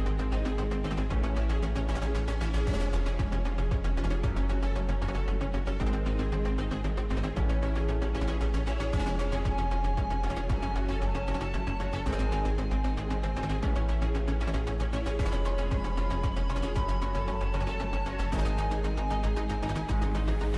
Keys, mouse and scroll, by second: 0.9-2.6 drag, 2.6 a, 3.9-5.3 shift+middle drag, 5.3 scroll down 1, 5.6-7.0 shift+middle drag, 7.0 a, 7.2 s, 8.1 r, 9.2 g, 9.6 s, 10.6 g, 11.0 Tab, 12.0 click, 12.2 Tab, 13.1 KP_7, 14.5 shift+middle click, 15.1 scroll up 2, 16.2 click, 18.8 u, 19.7-20.5 drag.